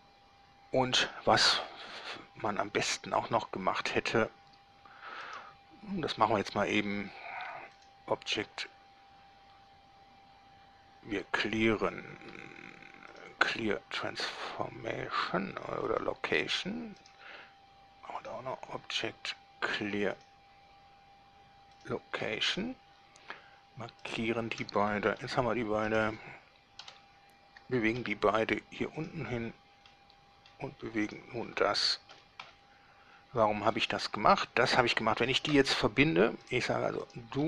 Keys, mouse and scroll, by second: 5.5 right click, 7.9 click, 13.3 click, 16.1 click, 17.2 right click, 18.4 click, 20.4 click, 21.9 click, 24.2 shift+right click, 25.4 g, 26.1 right click, 27.1 7, 28.2 g, 29.2 click, 30.1-30.9 middle drag, 31.3 right click, 32.3 g, 32.6 z, 33.9 click, 34.1 scroll up 2, 34.3-35.2 middle drag, 36.6 right drag, 37.2 right click.